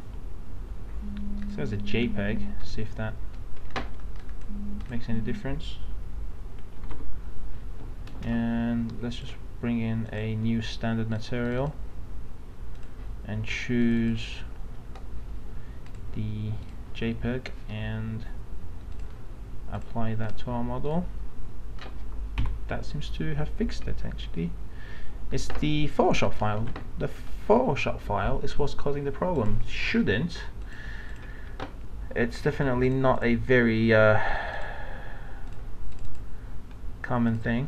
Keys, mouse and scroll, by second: 6.8 alt+Tab, 8.1 m, 9.2 click, 22.4 F9, 26.2 click, 26.6 alt+Tab, 29.4 click.